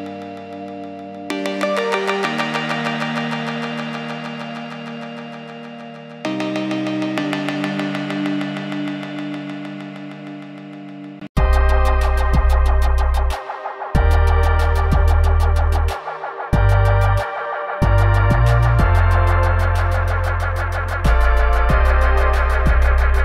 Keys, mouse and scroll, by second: 0.8 click, 4.0 Left, 4.5 click, 5.0 Left, 5.2 click, 5.8 Left, 6.9 click, 8.1 click, 8.8 click, 9.3 click, 10.3 scroll up 1, 10.6 click, 13.8 click.